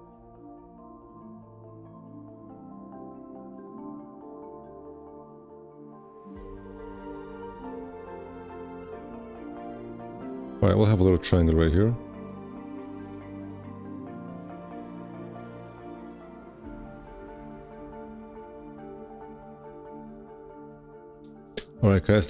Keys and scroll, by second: 21.8 1, 22.0 q.